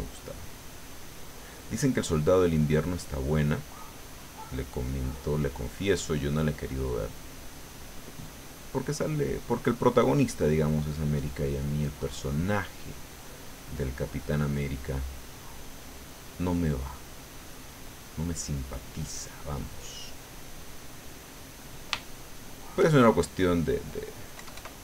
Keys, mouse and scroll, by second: 4.7-5.7 middle drag, 6.0-10.5 drag, 11.6 middle click, 12.8-18.4 drag, 18.7 middle click, 19.7-21.3 middle drag, 21.4-22.9 middle drag, 23.0 shift+middle click, 24.3 KP_Add.